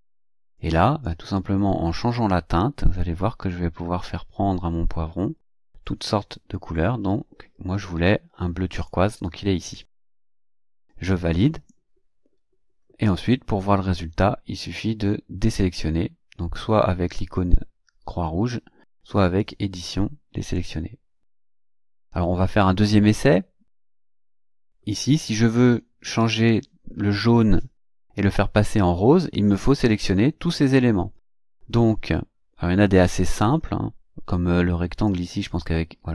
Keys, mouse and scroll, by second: 0.5-1.2 drag, 2.1-9.1 drag, 11.5 click, 19.2 click, 20.5 click, 24.3 click, 33.3 click, 35.1 click.